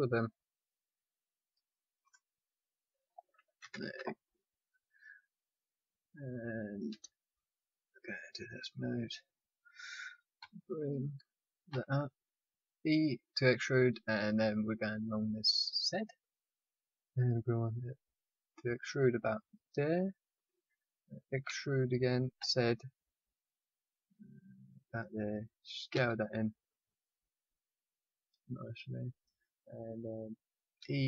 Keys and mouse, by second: 2.0 right click, 2.3-3.6 middle drag, 3.6 KP_1, 3.7 KP_5, 7.0 KP_3, 10.3 e, 21.4 e, 25.9 s, 30.7 e.